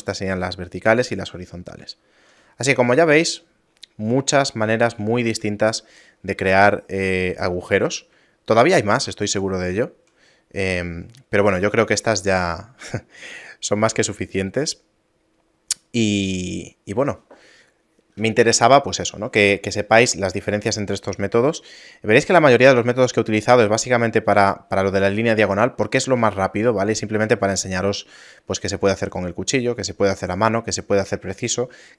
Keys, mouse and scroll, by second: 2.0 shift+middle click, 2.4 middle click, 2.8 Tab, 2.8-3.2 scroll down 3, 3.8 scroll down 5, 4.1 middle click, 4.5 scroll down 3, 5.2 shift+middle click, 5.5 middle click, 5.9 scroll down 2, 6.5 shift+space, 6.9 shift+middle click, 7.6 middle click, 8.3 shift+middle click, 8.7 shift+middle click, 10.3 scroll up 1, 11.0 middle click, 12.1 middle click, 21.1 middle click, 22.0 scroll up 1, 24.5 scroll up 4, 29.4 scroll up 5.